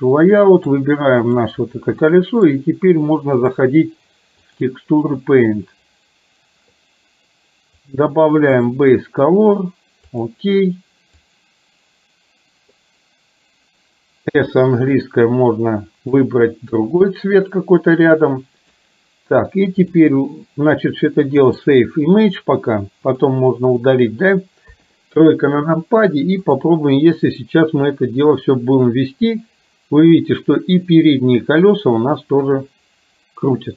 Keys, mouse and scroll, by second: 0.4 middle click, 2.3 middle click, 3.5-4.8 drag, 8.0-10.4 drag, 11.3-12.9 drag, 14.4 s, 15.1-16.3 drag, 16.9-18.9 drag, 19.9 click, 21.5 click, 23.3 click, 24.9 KP_3, 26.5 click, 28.0-33.7 drag.